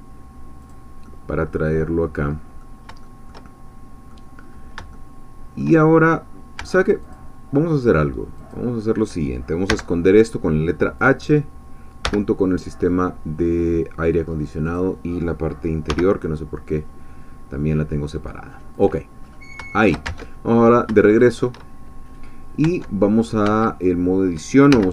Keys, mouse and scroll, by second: 0.6 click, 1.1-2.9 middle drag, 3.0-4.4 shift+middle drag, 4.4-4.9 scroll up 1, 4.9 shift+middle click, 6.1-6.6 shift+scroll down 2, 6.6 Tab, 7.1 click, 8.5 click, 9.7 h, 11.0-12.0 drag, 12.0 h, 12.9-14.4 middle drag, 14.8 click, 15.9 h, 16.7-18.7 middle drag, 18.7 click, 19.2-19.5 scroll up 1, 19.7 shift+middle click, 20.1 Tab, 20.5-20.8 shift+scroll up 3, 21.1 shift+middle click, 22.6 Tab, 23.4 Tab, 24.7 1.